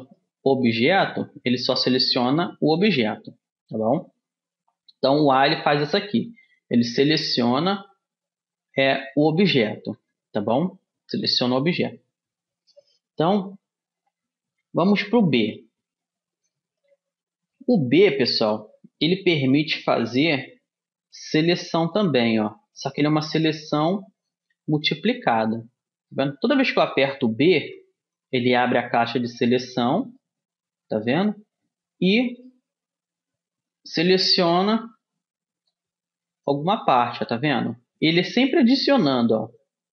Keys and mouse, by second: 0.6 Tab, 1.4 a, 5.5 a, 8.7 middle click, 10.0 a, 11.2 a, 14.2 middle click, 14.8-22.4 middle drag, 20.8 b, 27.7 b, 30.3 middle click, 33.7 b, 39.1 b.